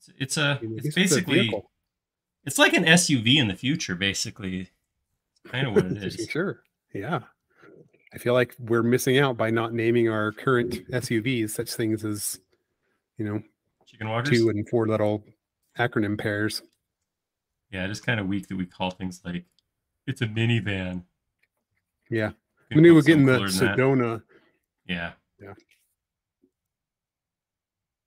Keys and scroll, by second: 0.7 space, 24.2 i.